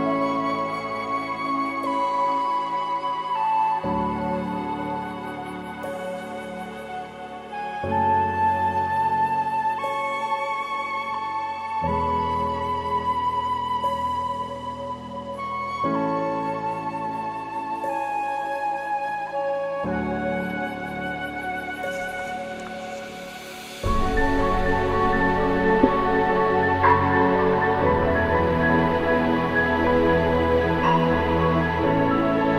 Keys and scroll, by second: 4.1 alt+BackSpace, 5.3 ctrl+d.